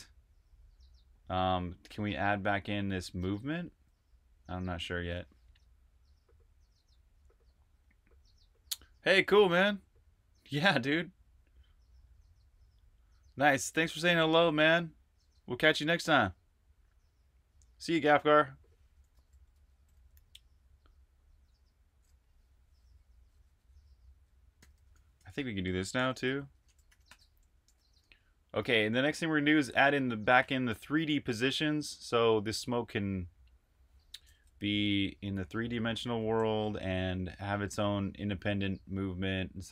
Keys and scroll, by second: 3.1-3.6 typing, 19.4 Escape, 19.8 j, 21.8 typing, 24.4-28.7 typing, 34.2-35.1 typing, 36.4 super+q, 36.9-38.7 typing.